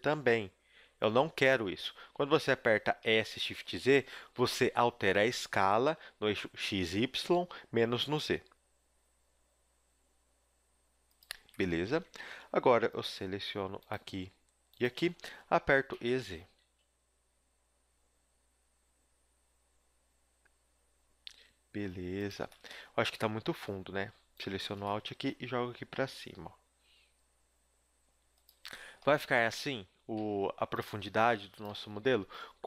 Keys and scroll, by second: 1.0 ctrl+z, 2.0 z, 3.0 s, 11.3 a, 12.2 ctrl+Tab, 15.8 e, 22.4 a, 25.4 g, 28.6 a, 29.6 KP_1, 30.2 ctrl+Tab, 31.9 z, 32.1 b.